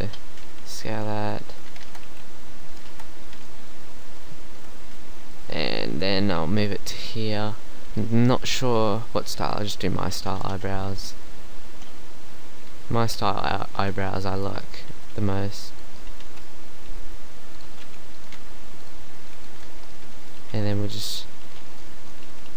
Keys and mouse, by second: 0.5 g, 1.9 shift+Tab, 2.1 g, 2.9 shift+Tab, 4.6 KP_1, 6.2 g, 8.7 middle click, 9.5 s, 10.9 s, 12.7 KP_1, 13.1 KP_3, 14.9 e, 16.2 g, 17.7 a, 17.9 b, 19.0 z, 19.2 b, 19.5 z, 20.4 g, 22.2 g.